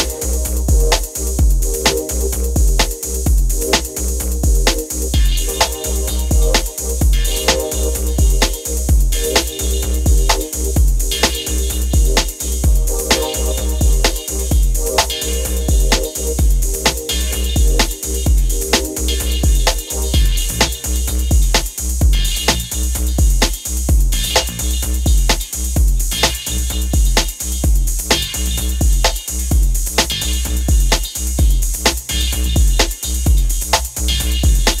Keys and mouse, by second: 0.4 middle click, 0.9-2.4 drag, 2.5 click, 2.5-6.3 middle drag, 6.4 click, 8.0 middle click, 8.2-9.9 drag, 10.0 click, 11.6-13.2 drag, 14.7-20.4 drag, 14.7-15.8 middle drag, 15.8 middle click, 20.5-25.8 drag, 25.8-28.9 middle drag, 29.0-31.5 middle drag, 32.4 middle click.